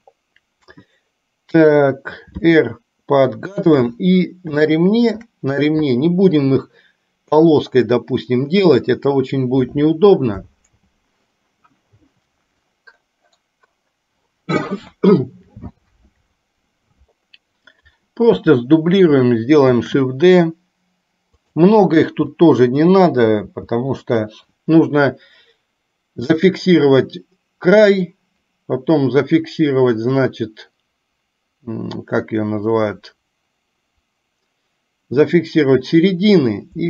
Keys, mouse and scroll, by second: 2.6 r, 4.8 shift+middle click, 19.7 shift+d, 22.1 r, 23.6 g.